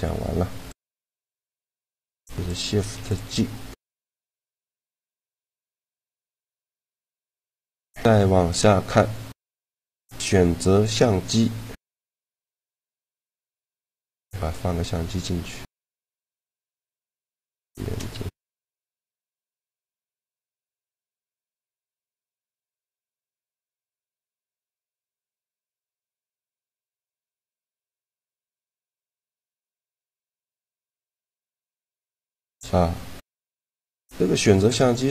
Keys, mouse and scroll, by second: 0.4-2.3 drag, 1.8 a, 2.2 b, 2.7 x, 5.1 shift+c, 8.9 click, 17.8 a, 18.5 click, 19.0-20.3 drag, 20.1 right click, 20.5 right click, 20.7 right click, 21.7 ctrl+KP_0, 23.5 a, 24.2 g, 27.3 shift+d, 28.2 a, 28.5 right click, 29.1 a, 29.7 right click, 29.9 click, 30.3 click, 30.5-31.7 drag, 31.5 a, 33.3-35.1 drag.